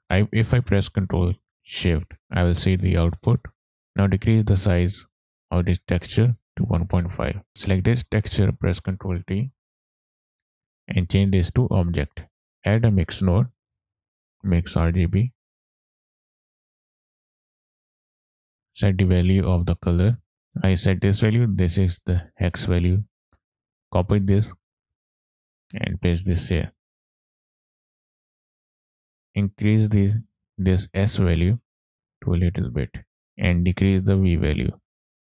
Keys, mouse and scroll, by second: 0.0 click, 0.0 ctrl+right click, 1.9 ctrl+shift+click, 4.2-5.5 drag, 5.6-7.4 drag, 7.5 middle click, 7.5 scroll down 1, 7.9 click, 9.2 ctrl+t, 10.1 click, 11.6-12.3 drag, 12.3 middle click, 12.3 shift+a, 16.0-16.5 scroll up 2, 16.2 click, 16.6 ctrl+right click, 17.9 click, 18.4 click, 26.6 click.